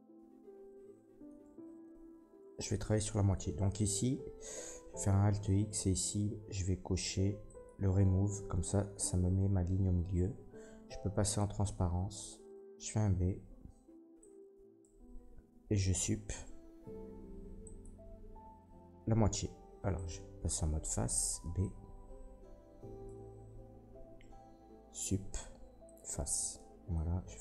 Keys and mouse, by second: 1.4 Tab, 4.7 alt+x, 7.6-11.3 middle drag, 11.3-27.4 drag, 13.2 b, 16.0 Delete, 21.4 b, 24.8 Delete.